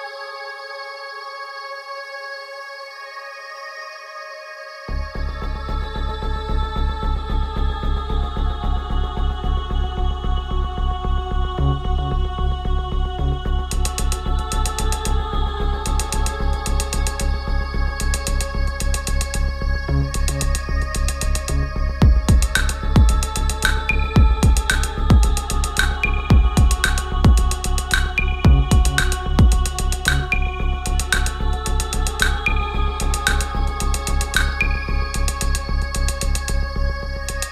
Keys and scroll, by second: 5.2 ctrl+z.